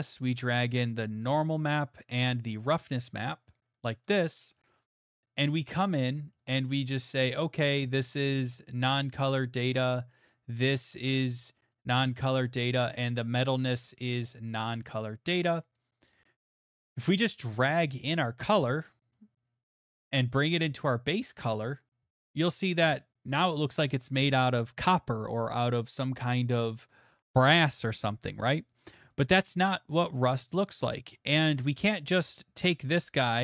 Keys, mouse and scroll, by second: 4.1 click, 4.6 click, 4.9 middle click, 5.0 middle click, 5.0 middle click, 5.0 middle click, 6.0 click, 6.3 middle click, 7.1 click, 9.7 middle click, 10.1 middle click, 10.8 click, 11.8 click, 13.9 click, 14.9 middle click, 16.2 click, 17.0 middle click, 17.0 scroll, 18.1 middle click, 18.1-18.5 scroll, 18.6 middle click, 21.5 click, 24.0 middle click, 28.4 middle click, 31.0 click, 31.5 middle click.